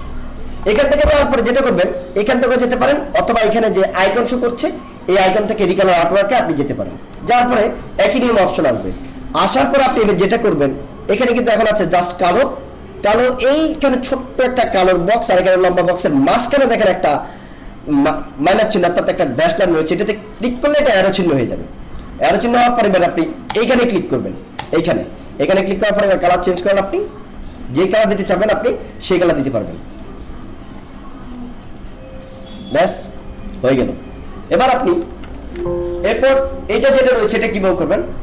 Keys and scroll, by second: 35.3 alt+space.